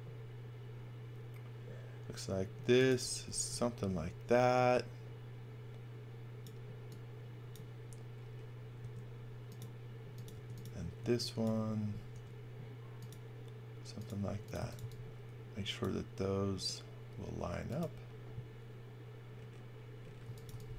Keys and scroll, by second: 3.0 x, 3.2 v, 8.8 s, 10.3 space, 10.9 x, 12.1 s, 14.2-15.2 typing, 17.5 space, 20.0-20.7 typing.